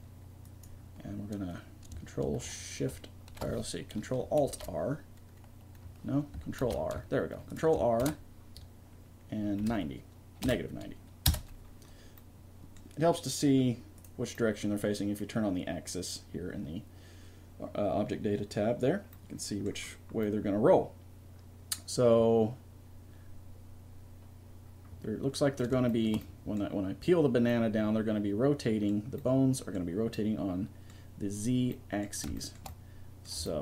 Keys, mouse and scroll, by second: 4.4 ctrl+alt+r, 6.6 ctrl+r, 8.0 ctrl+r, 12.3-14.0 middle drag, 14.0 click, 14.5-15.6 middle drag, 19.1-22.0 middle drag, 25.9-28.9 middle drag, 29.6 middle click, 32.8 middle click.